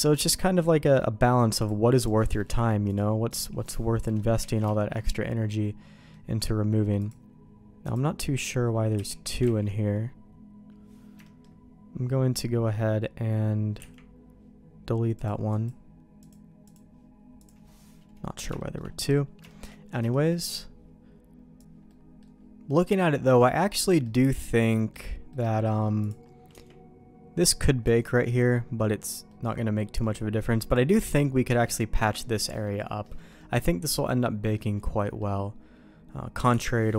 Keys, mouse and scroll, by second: 0.8 middle click, 1.6 click, 2.3 middle click, 2.9 click, 3.6 middle click, 4.5 alt+a, 4.7 shift+middle click, 5.1 middle click, 7.0 click, 7.8-8.9 drag, 8.9 h, 9.4 ctrl+z, 11.2 middle click, 13.8 Delete, 15.1 click, 15.5 click, 16.2 click, 16.6 click, 17.4 click, 18.5 shift+middle click, 19.4 shift+middle click, 20.1 shift+middle click, 21.8 middle click, 22.6 middle click, 23.3 middle click, 24.0 middle click, 24.7 middle click, 25.3 middle click, 26.0 click, 26.5 Tab, 27.8 Tab, 29.2 middle click, 30.0 middle click, 30.7 click, 31.4 Tab, 31.9 Tab, 32.3 middle click, 33.0 middle click, 33.3-34.5 middle drag, 35.0 middle click, 36.5 Delete.